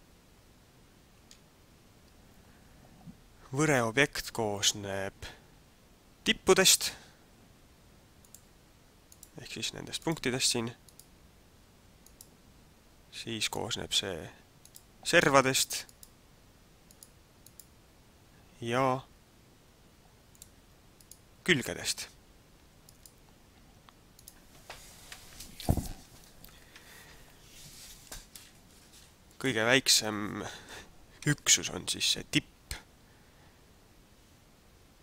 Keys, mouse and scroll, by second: 6.7 right click, 8.3 click, 9.1 right click, 10.0 right click, 10.9 right click, 12.1 right click, 13.5 click, 14.6 right click, 15.9 right click, 18.7 right click, 20.3 click, 21.0 right click, 24.1 right click, 29.5 click, 31.1 a.